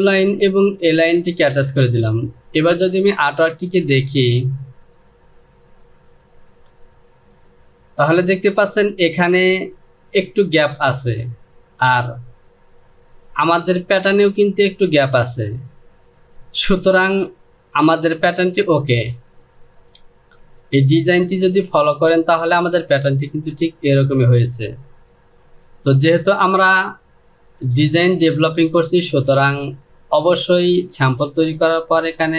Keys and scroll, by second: 31.3 Delete.